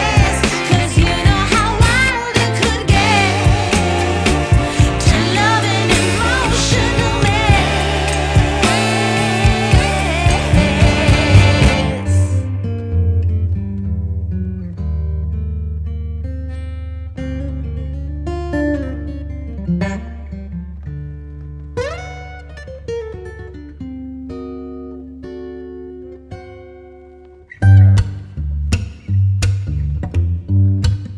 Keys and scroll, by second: 23.2 v, 30.5 super+c.